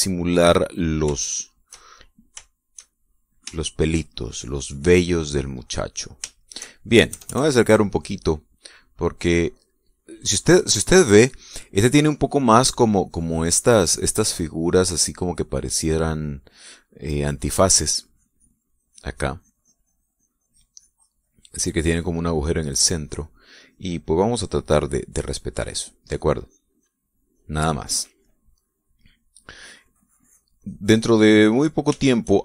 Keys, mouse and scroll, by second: 1.8-4.5 shift+middle drag, 4.6-5.6 shift+middle drag, 5.9-7.3 middle drag, 7.6 KP_Add, 8.2 middle click, 9.4 click, 12.7-15.4 drag, 15.6-16.4 middle drag, 17.2 middle click, 18.5-22.6 drag, 22.7 middle click, 23.2 click, 24.1-27.7 drag, 27.8 click, 28.7-29.9 middle drag, 30.1 middle click, 30.7-31.9 drag, 32.0 middle click.